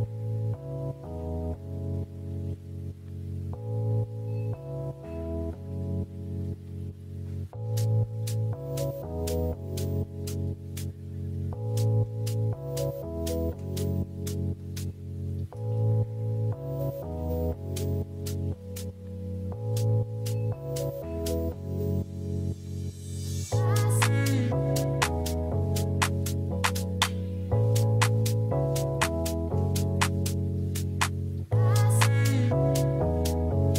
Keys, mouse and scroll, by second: 0.0 g, 2.5 x, 4.1 g, 4.2 y, 4.9 click, 6.6 g, 6.8 y, 9.8 s, 12.7 r, 14.6 click, 15.0 ctrl+5, 15.3 middle click, 15.7 Tab, 15.9 middle click, 20.4-22.2 drag, 25.0 shift+a, 27.9 middle click, 28.9-29.8 drag, 30.2 click, 33.5 click.